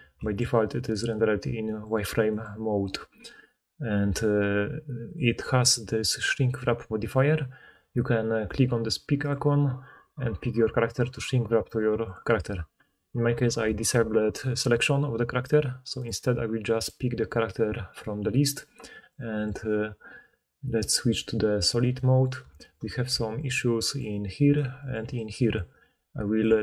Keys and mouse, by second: 5.2-6.5 middle drag, 6.5-9.4 drag, 9.4-16.1 middle drag, 16.1-20.9 drag, 20.9-23.3 middle drag, 23.1-26.4 typing, 23.3-26.6 drag, 24.0-26.6 middle drag, 24.0-26.6 right drag.